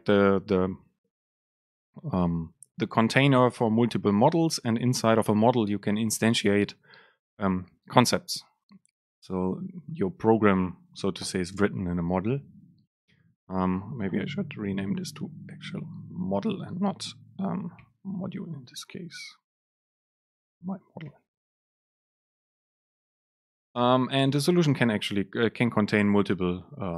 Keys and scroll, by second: 18.0 shift+F6, 19.1 alt+BackSpace.